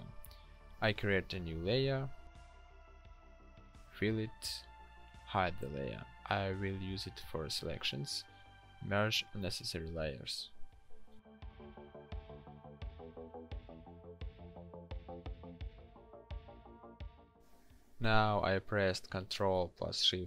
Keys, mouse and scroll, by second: 1.2 ctrl+shift+n, 4.8 g, 6.6 ctrl+e, 10.1 ctrl+shift+n, 18.4 ctrl+shift+i.